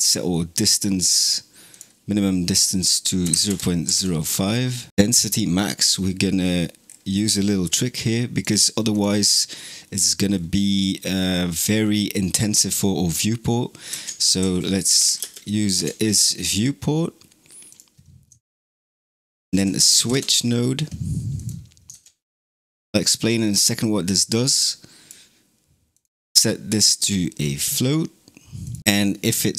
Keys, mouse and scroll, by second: 0.1-1.6 middle drag, 1.6-4.7 drag, 5.1 scroll down 2, 6.1 middle click, 6.7-7.1 scroll down 8, 8.2 click, 8.8 click, 9.6 scroll up 2, 10.1 scroll down 2, 11.0-13.7 scroll up 3, 13.7 shift+a, 18.2 shift+a, 21.7 shift+Tab, 22.1 click, 23.9 click, 25.8-29.5 drag.